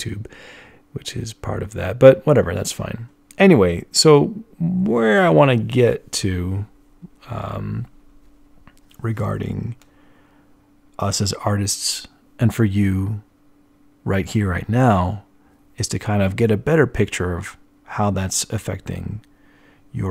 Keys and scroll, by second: 9.0 z.